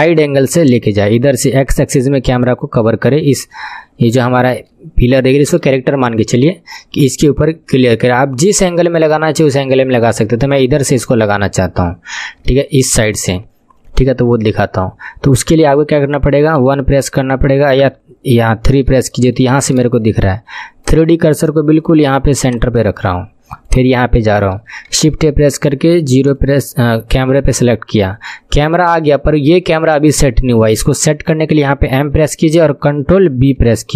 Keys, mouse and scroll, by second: 3.6-4.2 scroll up 7, 4.2 shift+middle click, 5.1-5.9 scroll up 2, 5.9 shift+middle click, 6.6 scroll down 3, 7.7-11.4 shift+middle drag, 11.4-12.0 scroll up 3, 12.0 scroll down 3, 12.4-17.8 shift+middle drag, 16.6 KP_1, 17.8 KP_3, 18.8-19.1 scroll up 1, 19.1 shift+middle click, 19.5 scroll up 1, 19.8-20.8 shift+middle drag, 20.8-24.9 drag, 24.9 shift+a, 31.9 m, 33.7 ctrl+b.